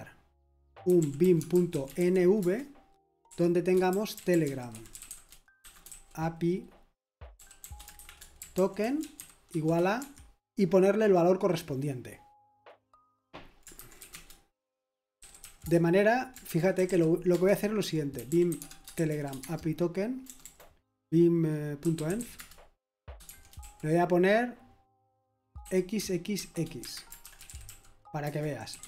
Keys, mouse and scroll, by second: 0.6-5.9 typing, 2.4 Return, 7.1-11.0 typing, 10.0 Escape, 13.8-20.4 typing, 21.5-24.1 typing, 25.6-28.8 typing, 26.8 Escape.